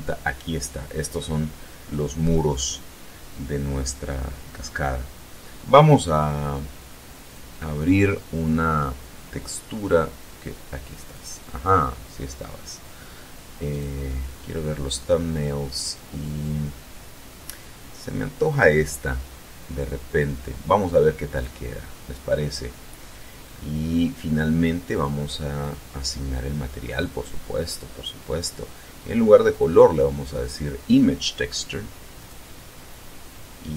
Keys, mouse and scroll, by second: 7.3 click, 9.8 scroll down 2, 11.1 click, 13.7 click, 16.0-16.6 scroll down 2, 19.8 click, 21.3 click, 22.5-22.9 scroll down 1, 23.4 scroll up 2, 25.6 click, 26.9 click, 29.4 click, 32.1 click.